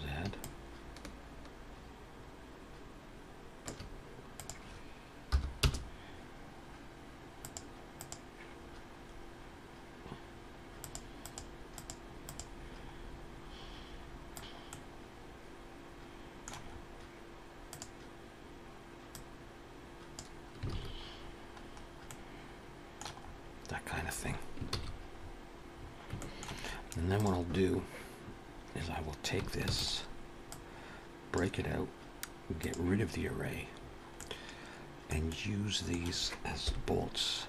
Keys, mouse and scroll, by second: 0.2 shift+click, 4.4 click, 7.8 click, 8.4-9.2 scroll down 5, 10.6 click, 11.0 click, 12.0 click, 12.2 click, 12.9 scroll up 3, 14.2 click, 14.4 alt+a, 14.4 scroll down 3, 14.5 middle click, 16.5 scroll up 2, 17.8 click, 18.9 click, 20.5-22.1 alt+scroll down 10, 20.6 alt+a, 21.9 middle click, 23.0-23.6 scroll up 3, 24.6 ctrl+s, 25.0-25.5 scroll up 3, 25.6-26.0 scroll down 3, 26.0 shift+middle click, 26.4-27.0 scroll up 2, 27.0 click, 27.4-28.1 scroll down 2, 29.5 shift+d, 30.9 click, 32.4 click, 33.1-33.6 scroll up 2, 33.6 scroll down 1, 33.8 scroll down 1, 34.0 middle click, 35.1 middle click, 36.5 KP_1.